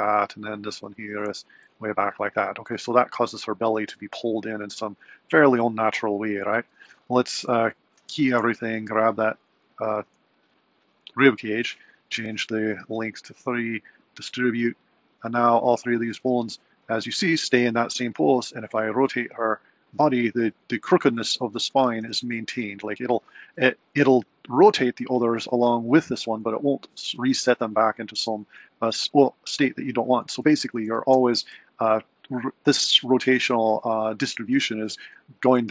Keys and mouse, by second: 0.6 click, 7.5 a, 7.9 i, 8.8 click, 12.9 click, 14.0-16.8 drag, 17.8 click, 18.7 r, 22.0 r, 25.6 r, 31.0 r.